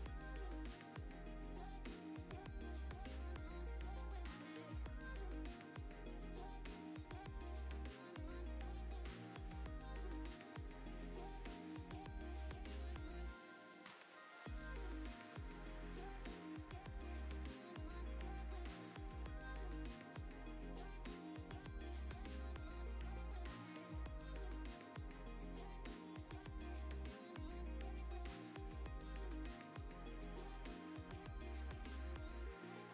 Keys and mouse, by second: 0.0 click, 0.7 shift+s, 0.9 shift+a, 1.4 Tab, 1.5 s, 1.9 click, 2.1 Tab, 2.3 middle click, 2.8 shift+middle click, 3.3 middle click, 3.7 shift+middle click, 4.5 n, 5.3 shift+a, 6.7 ctrl+alt+KP_0, 6.9 g, 7.0 z, 7.0 z, 7.5 click, 7.8 click, 8.0 click, 8.3-12.6 typing, 9.5 click, 10.5 click, 11.1 click, 11.2 Tab, 11.3 click, 11.4 Tab, 12.1 alt+click, 13.7 click, 14.4 i, 14.8 click, 14.9 e, 15.1 click, 15.2 Tab, 15.6 ctrl+s, 16.1 click, 17.3 right click, 18.5 Tab, 18.7-19.7 typing, 19.2 click, 20.1 click, 20.4 middle click, 20.7 middle click, 21.0-22.9 typing, 21.1 click, 22.5 click, 22.6 click, 23.0 click, 23.1 ctrl+b, 24.0 click, 24.3 KP_0, 24.7 Tab, 25.2 ctrl+s, 27.8 click, 28.4 click, 28.5 click, 28.7 click, 28.9 click, 29.2 click, 29.6 click, 30.0 click, 30.6 click, 30.8 click, 31.1 click, 31.5 click, 32.3 click, 32.7 click.